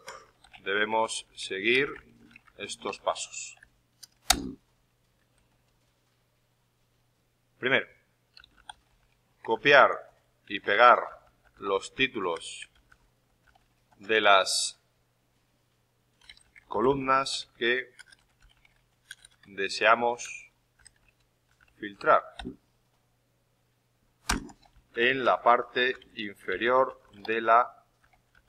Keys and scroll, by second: 0.0-5.9 typing, 8.3-13.8 typing.